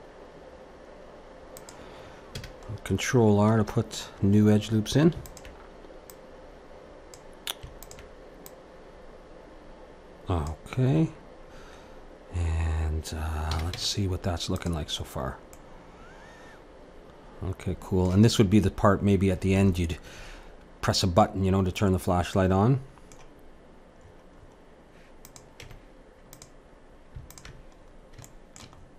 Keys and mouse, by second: 2.3 a, 2.7-5.2 middle drag, 5.2-10.3 drag, 11.1-13.5 middle drag, 13.5 a, 13.7 Tab, 15.1-17.4 middle drag, 22.4-25.3 middle drag, 25.3-27.1 drag, 25.6 Tab, 27.3-28.8 drag, 28.2 middle click.